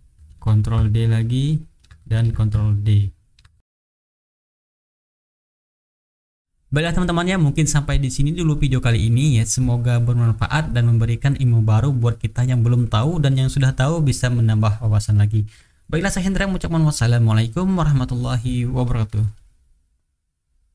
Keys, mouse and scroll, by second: 0.2 ctrl+d, 0.5-1.9 ctrl+drag, 2.1 ctrl+d, 2.3-3.5 ctrl+drag, 3.6 ctrl+shift+click, 3.6 ctrl+d, 3.7 ctrl+shift+right click, 3.8 click, 3.9 shift+middle click, 4.1 click, 4.3 middle click, 4.3 click, 4.5 middle click, 4.6 shift+click, 4.8 right click, 4.8 shift+middle click, 4.9 click, 5.0 middle click, 5.2 Return, 5.3 ctrl+click, 5.5 ctrl+d, 5.7 ctrl+click, 5.9 shift+middle click, 5.9 shift+right click.